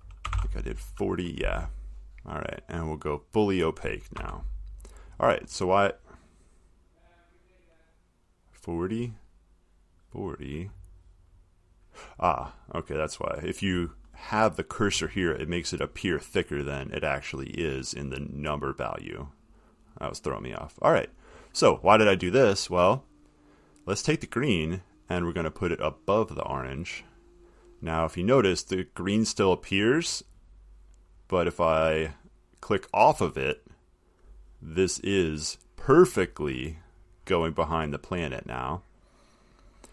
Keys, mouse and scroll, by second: 0.2-1.0 typing, 3.7 click, 4.4 1, 5.0 click, 5.7 middle click, 5.7 middle click, 8.6 click, 10.1 click, 10.5 click, 14.4 click, 18.4 click, 19.7 click, 20.1 click, 26.3 click, 31.4 click, 32.2 click, 33.9 click, 36.3 middle click, 36.4 middle click, 36.7 middle click, 37.4 middle click.